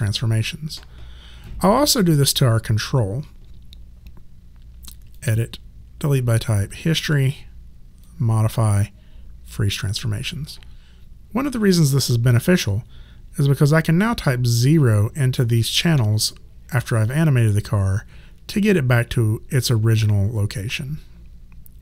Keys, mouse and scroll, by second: 1.5 click, 5.1 click, 8.0 click.